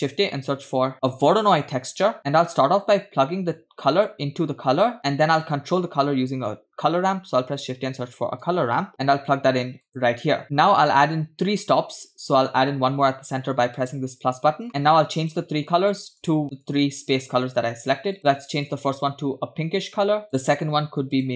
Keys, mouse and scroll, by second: 3.9-5.9 drag, 7.0 shift+a, 10.4 click, 10.4 middle click, 10.4-11.3 scroll up 4, 11.3-11.7 scroll up 1, 13.8-14.3 drag, 14.9 middle click, 14.9-15.2 scroll up 2, 15.2 click, 15.7 click, 16.6 click, 18.6 click, 20.4 click, 21.2 drag.